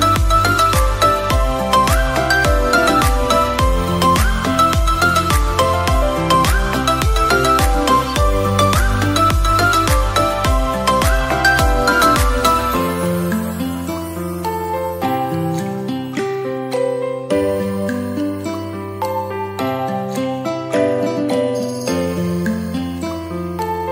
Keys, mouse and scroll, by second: 0.7 KP_7, 2.3 s, 2.7 y, 4.7 click, 5.4 r, 6.0 y, 11.3 click, 14.0 shift+d, 14.2 x, 16.7 click, 18.5-19.1 scroll down 2, 19.1-19.6 scroll up 1, 20.1 click, 22.2-22.5 drag.